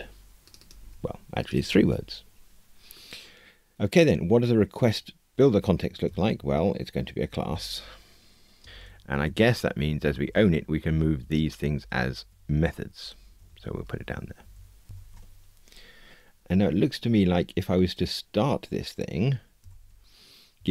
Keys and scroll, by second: 0.8 super+v, 13.0 super+x.